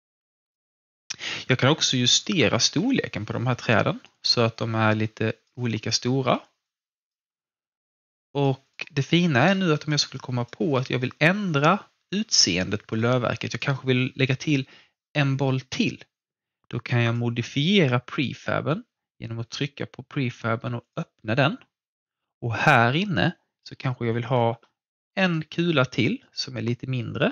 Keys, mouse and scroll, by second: 2.7 r, 3.3 click, 4.1 w, 4.5 click, 6.2 r, 6.6 click, 7.1 w, 7.6 click, 9.7 alt+middle click, 10.1 alt+click, 10.7 alt+middle click, 13.5 click, 17.0 click, 20.8 click, 21.0 click, 24.0 ctrl+d, 25.1 alt+click, 26.2 r, 26.8 click.